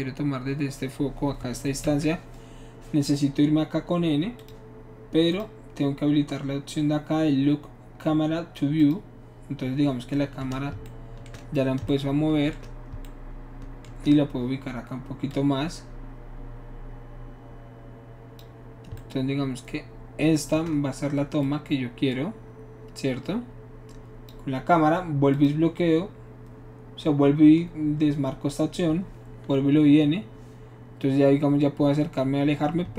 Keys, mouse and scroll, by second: 1.9 n, 4.4 click, 5.3 click, 8.8 click, 9.6 middle click, 10.1-10.8 middle drag, 15.3 shift+click, 16.4-18.4 drag, 21.4-24.3 shift+drag, 25.3 click, 29.7 n.